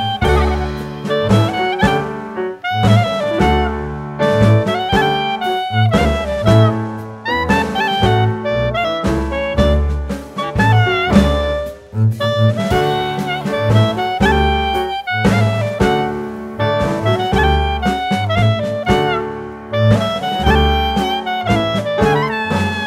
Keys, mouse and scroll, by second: 3.3 click, 9.1 click, 12.7 shift+click, 14.3 ctrl+z, 14.9 click, 17.4-18.0 scroll down 2, 18.7 s.